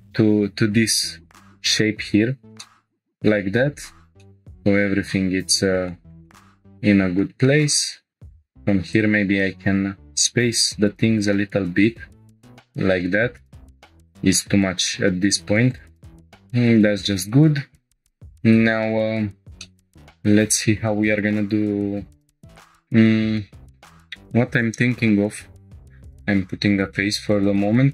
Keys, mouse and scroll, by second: 2.6 shift+middle click, 2.7 scroll down 1, 3.5 click, 4.1 scroll up 2, 4.2-5.8 drag, 4.2 middle click, 5.9 shift+middle click, 6.2-7.2 middle drag, 7.3 shift+scroll down 1, 7.4 shift+middle click, 7.9 scroll down 1, 8.1 scroll up 1, 8.1 2, 8.2-8.7 drag, 8.9 ctrl+click, 9.3 right click, 12.0 scroll down 1, 12.3 middle click, 13.1 scroll up 1, 13.8 1, 14.0 click, 14.9 g, 15.0 g, 15.7 click, 16.2 shift+middle click, 16.2 scroll down 1, 17.5 scroll up 2, 17.9-18.4 scroll down 1, 18.4 scroll up 1, 18.9 scroll down 1, 19.4 scroll up 1, 19.6 shift+middle click, 19.7 scroll down 1, 22.4 click, 22.6 shift+middle click, 23.2 scroll up 2, 25.8 shift+click, 25.8 2, 25.8 f, 26.1 scroll down 1, 27.3-27.9 drag.